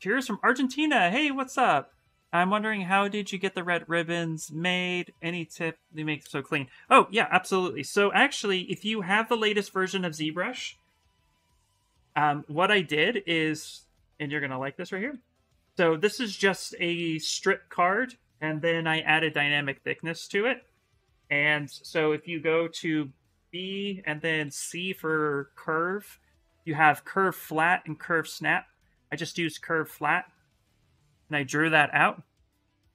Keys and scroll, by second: 11.8 shift+d, 15.6 shift+f, 18.4 d, 19.0 shift+f, 22.2 b, 24.1 c.